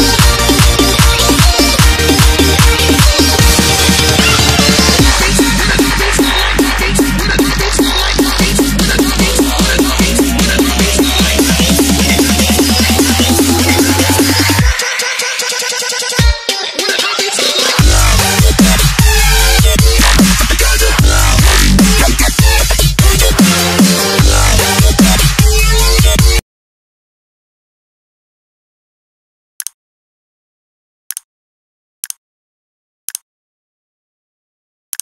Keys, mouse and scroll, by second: 0.0-0.7 typing, 0.7 click, 2.3 KP_Add, 3.1 KP_3, 3.7 click, 4.2 click, 4.7 click, 5.5 Return, 5.7 Up, 5.9 0, 6.2 click, 7.2 s, 8.2 s, 9.7 click, 15.9 s, 17.3 click, 17.5 click, 21.5 ctrl+c, 22.7 click, 23.8 v, 24.6 click.